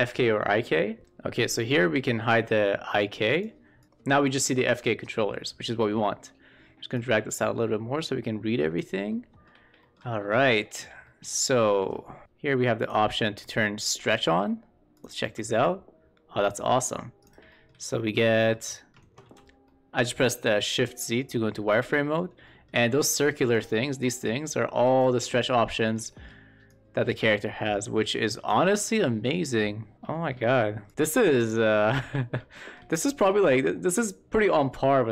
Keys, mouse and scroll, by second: 2.3 click, 2.9 shift+middle click, 3.2 click, 3.8 e, 6.8-8.7 drag, 9.0-9.3 shift+middle drag, 9.7 shift+middle click, 10.4 shift+middle click, 10.9-11.6 shift+middle drag, 14.1 shift+middle click, 14.8 click, 15.6-17.2 drag, 15.6 w, 17.4 shift+middle drag, 17.7-18.0 middle drag, 18.2 shift+middle drag, 18.6 middle drag, 19.2 shift+z, 19.5-19.9 middle drag, 21.2-22.0 middle drag, 22.3 middle click, 23.3 click, 23.9-24.9 drag, 25.1 shift+z, 25.6 middle drag, 26.0 shift+middle drag, 26.6-28.4 drag, 28.7 click, 29.4-29.9 drag, 30.0 shift+middle drag, 30.8 click, 30.9 w, 31.3 click, 32.4 shift+middle drag, 32.9 middle click.